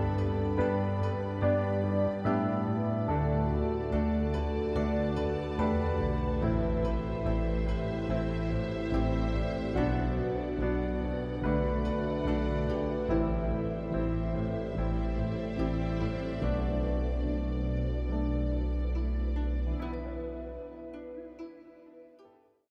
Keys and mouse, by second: 2.6 click, 6.0-8.0 drag, 13.8-17.6 middle drag, 17.6-19.2 drag, 19.5-22.7 middle drag.